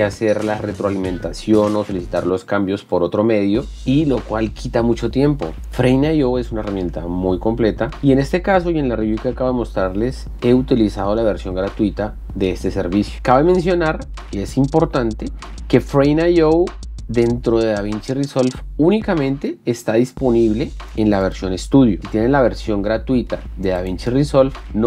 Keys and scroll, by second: 22.8 ctrl+i.